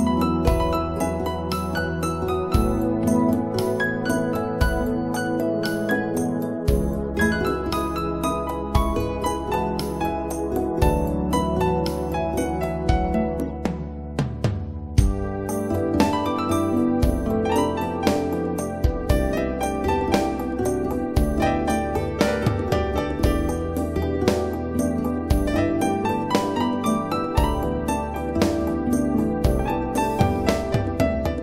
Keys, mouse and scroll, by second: 1.8 click, 8.1 click, 11.3 click, 12.5 right click, 12.8 click, 13.5 scroll up 1, 13.8 scroll down 1, 16.4-18.0 scroll up 1, 18.3 right click, 28.0 click.